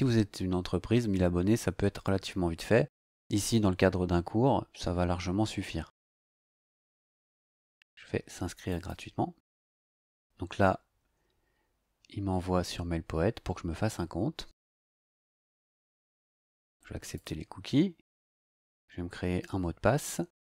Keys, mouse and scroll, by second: 8.7 click, 16.4 click, 18.3 click.